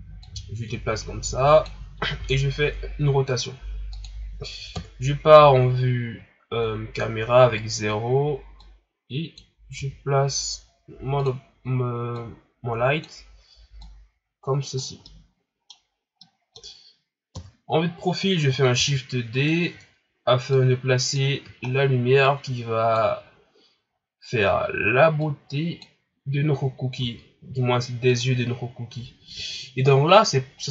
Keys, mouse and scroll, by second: 0.2-2.1 drag, 2.1 r, 4.7 KP_0, 6.2 shift+scroll up 4, 7.0-7.5 scroll down 2, 7.5 shift+scroll up 4, 8.6-9.8 drag, 9.8 s, 13.8-15.0 drag, 15.0-15.8 middle drag, 15.8-16.2 scroll down 2, 16.2-17.3 middle drag, 17.3 KP_3, 18.1-18.7 scroll up 3, 18.7 shift+d, 19.6-20.5 scroll down 4, 20.5-21.5 drag, 21.5-22.2 scroll up 3, 22.2 click, 23.1 scroll up 3, 25.2-27.0 drag, 27.0 s.